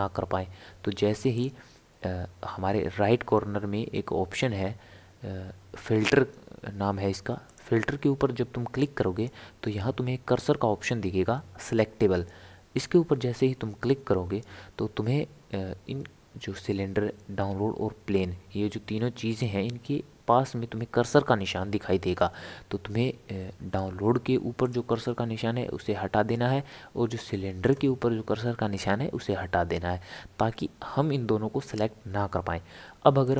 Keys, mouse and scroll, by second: 7.5-10.6 drag, 24.6 click, 27.6 click, 33.2 click.